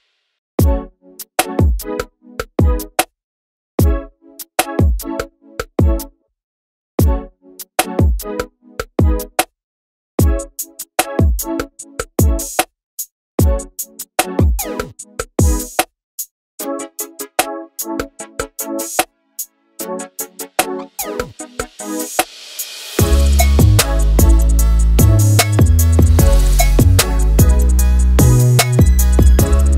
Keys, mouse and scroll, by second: 0.0 ctrl+space, 0.6 scroll down 2, 0.7 alt+a, 0.8-1.9 middle drag, 1.9 click, 2.6 scroll down 2, 2.7 shift+middle click, 2.8 click, 4.6 ctrl+space, 5.2 alt+a, 5.3-5.8 middle drag, 5.8 scroll up 2, 5.9-6.7 middle drag, 7.5 scroll down 1, 7.6 shift+middle drag, 7.7 scroll up 4, 7.8-8.2 middle drag, 8.2 scroll up 1, 8.3 click, 8.4 scroll down 2, 8.6 KP_7, 9.0 z, 9.0-9.4 scroll up 2, 9.2 shift+middle click, 9.4 scroll down 1, 9.6-10.5 middle drag, 11.0-11.6 scroll down 3, 11.1 middle click, 11.4 middle drag, 11.6 shift+middle click, 11.7 scroll up 5, 11.9-12.3 middle drag, 12.3-12.9 scroll down 3, 12.4 middle click, 12.9 click, 13.0 middle click, 13.5 g, 13.8 middle click, 13.9 alt+a, 14.0 middle click, 14.2 KP_0, 15.8-16.2 scroll down 3, 16.2-16.7 drag, 16.7-18.3 scroll up 1, 18.3-18.8 drag, 19.7 click, 22.7 scroll down 2, 23.2 shift+a, 23.5 scroll up 1, 23.7 middle click, 24.0 scroll down 5, 24.2 middle click, 24.4 s, 24.9 scroll up 2, 25.1 Tab, 25.5 click, 25.7 scroll down 1, 25.8 middle click, 26.2 e, 27.9 middle click.